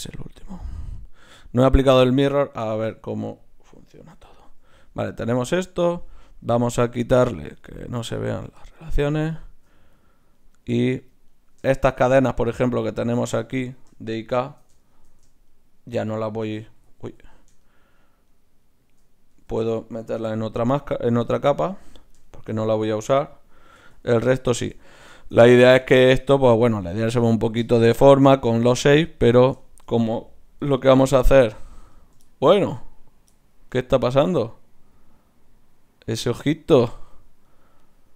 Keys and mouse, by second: 0.5-2.3 middle drag, 1.3-3.5 drag, 1.3-2.3 right drag, 4.1 alt+h, 5.3-7.3 right drag, 8.0-10.4 drag, 9.0 Tab, 17.1 ctrl+z, 19.3 Tab, 20.3 m, 23.8 Tab, 28.6-30.3 right drag, 29.0-30.1 drag, 30.6 g, 33.7-35.5 drag, 33.7-36.8 right drag, 34.1 g, 37.5-38.1 right drag.